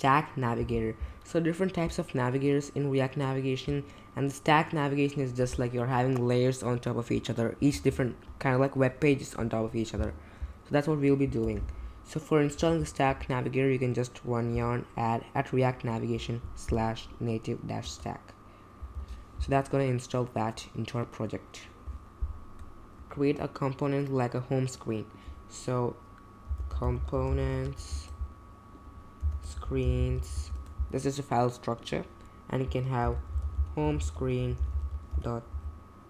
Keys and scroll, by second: 11.4 super+j, 12.6 super+v, 17.8 Return, 18.9 super+j, 26.2-31.0 typing, 32.8-36.0 typing.